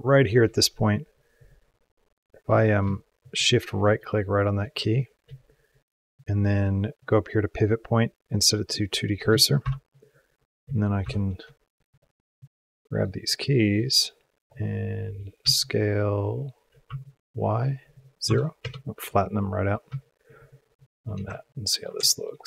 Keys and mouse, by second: 1.4-2.2 shift+drag, 3.1 shift+click, 3.7 shift+click, 4.5 shift+click, 4.6 shift+middle click, 6.9-8.2 drag, 9.6 shift+Up, 10.9 shift+Down, 11.7 click, 12.2-12.8 drag, 13.6-14.4 drag, 15.8 s, 19.8 shift+middle click, 20.2 shift+middle click, 20.7 shift+middle click, 21.2 ctrl+click, 21.9 shift+click, 22.4 click.